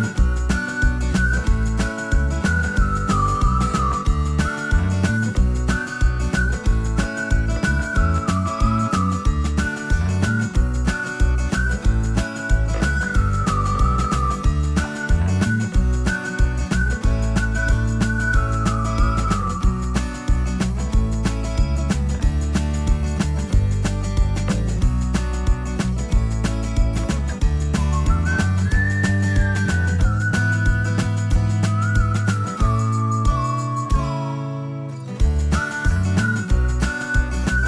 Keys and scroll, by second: 11.2 t, 11.9 space.